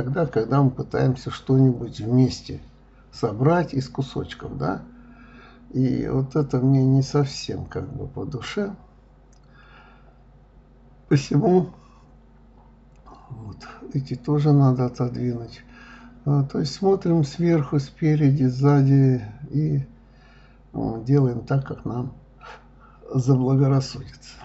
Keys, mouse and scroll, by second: 0.4-0.8 scroll up 2, 0.8-2.3 shift+middle drag, 2.7 k, 5.2 click, 5.5-7.1 middle drag, 8.9 click, 9.6 g, 10.8-12.3 middle drag, 12.9 shift+click, 13.4 shift+click, 13.9-15.4 middle drag, 15.4 g, 17.8-18.8 middle drag, 18.8 click, 19.2-19.6 y, 19.9 y, 21.1 right click, 22.5 shift+click, 23.8 g.